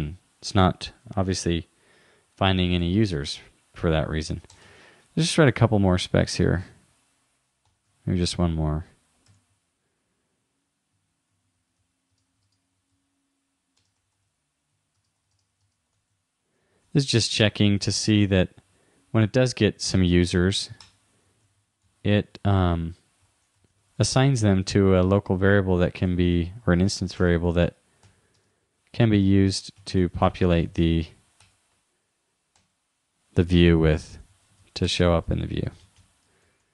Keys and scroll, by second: 2.9 super+w, 16.8 super+Right, 19.9 shift+-, 22.4 shift+9, 23.3 shift+;, 24.6 shift+0, 29.8 shift+2, 34.4 super+Left, 34.6 shift+Down.